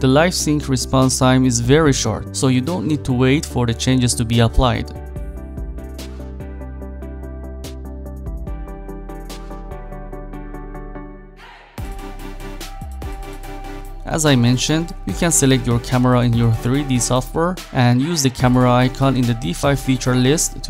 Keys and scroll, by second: 8.5 p, 12.1 shift+f, 13.4 Up, 13.7 Down.